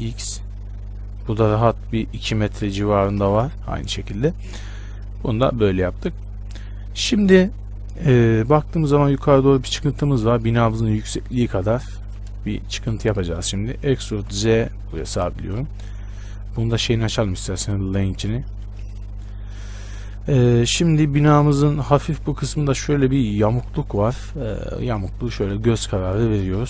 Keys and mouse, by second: 14.1 e, 15.8-17.7 drag, 16.3 n, 17.7 middle click, 18.2-20.6 drag, 18.2 n, 20.6-22.2 middle drag, 22.6-26.6 middle drag.